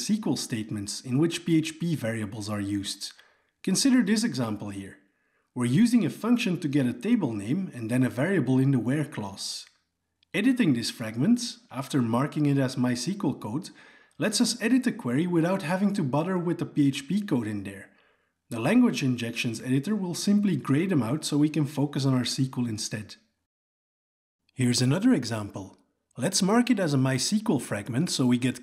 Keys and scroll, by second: 8.9 alt+Return, 9.1 alt+Return, 13.3 alt+Return, 23.1 Tab, 27.9 alt+Return.